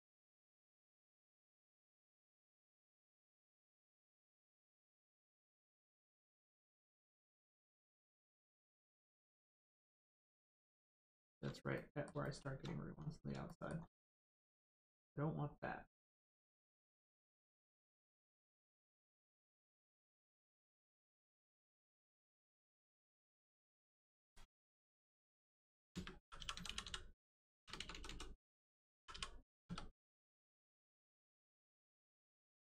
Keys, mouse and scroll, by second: 11.7 middle click, 12.2 shift+middle click, 12.9-13.3 scroll down 1, 17.3 click, 17.4 click, 18.3 middle click, 18.9 scroll up 1, 19.1 middle click, 19.6 Tab, 20.8 click, 24.2 right click, 25.9-27.7 typing, 28.9 r, 29.1 i, 29.6 Caps_Lock, 31.4 click.